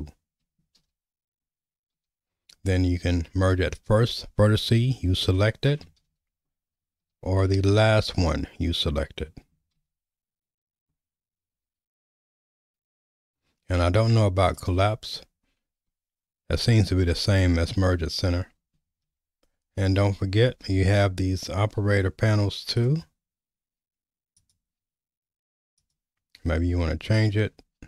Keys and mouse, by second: 0.8 ctrl+z, 1.9 m, 6.0 ctrl+z, 7.0 m, 9.8 ctrl+z, 11.5 m, 19.0 ctrl+z, 20.6 m, 24.3 click, 25.8-27.6 drag.